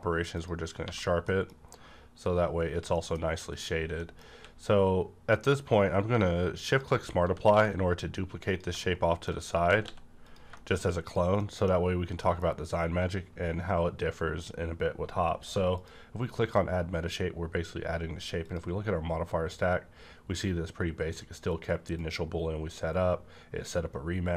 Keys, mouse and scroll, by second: 0.3 click, 0.8 click, 0.8 1, 1.3 middle click, 2.9 middle click, 3.4 click, 3.8 scroll down 1, 4.0 middle click, 4.3 q, 6.7 shift+click, 7.2 g, 7.3 shift+click, 7.5 x, 9.1 middle click, 9.6 g, 10.2 click, 10.5 middle click, 10.6-11.0 scroll down 1, 11.0 click, 11.3 middle click, 12.1 middle click, 15.7 click, 15.8 middle click, 18.4 click, 21.4 click, 21.5 click.